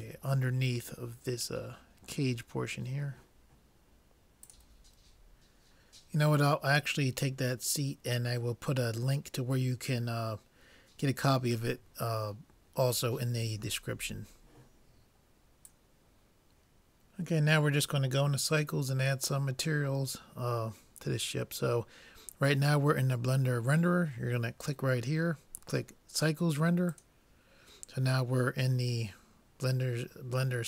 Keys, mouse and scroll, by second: 0.6-2.5 middle drag, 20.1-21.9 middle drag, 24.8-26.6 drag, 28.1-30.6 middle drag.